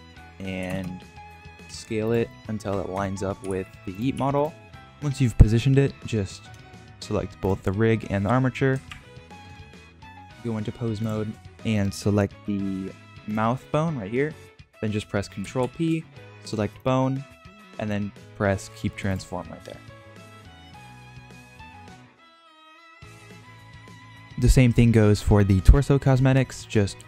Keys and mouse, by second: 1.4 shift+middle click, 1.6 s, 2.2-2.7 middle drag, 3.0 shift+middle drag, 3.3 g, 4.1 s, 4.6 click, 4.6 g, 8.8 ctrl+Tab, 10.9 click, 15.5 ctrl+p, 21.1 r, 22.9 ctrl+Tab.